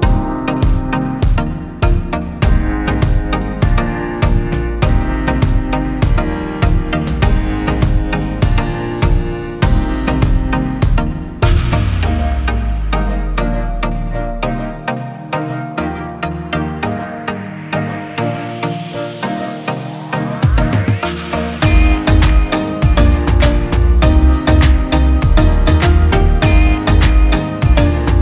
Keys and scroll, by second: 0.6 space, 9.6 space, 21.4 i.